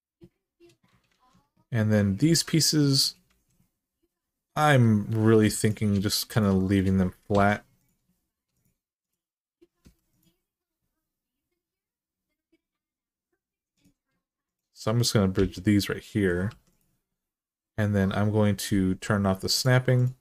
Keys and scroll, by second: 1.0 alt+z, 3.1 alt+z, 5.2 2, 7.1 2, 9.6 2, 15.1 f, 16.3 1.